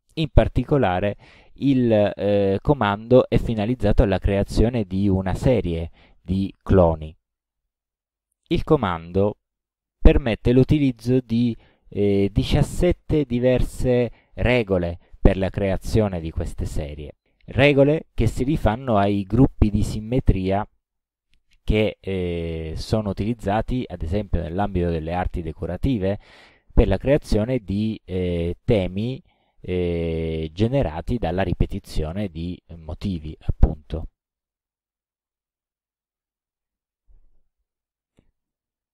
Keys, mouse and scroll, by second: 10.5 click, 11.9-12.3 scroll down 2, 14.7 click, 21.5-22.3 scroll down 4, 25.2-26.4 scroll down 5, 32.0 scroll down 2, 32.5 scroll down 2, 33.1 scroll down 2, 33.7-34.1 scroll down 2, 34.4-34.9 scroll down 2, 35.2-35.6 scroll down 2, 35.9-36.3 scroll down 2, 36.6-37.0 scroll down 2.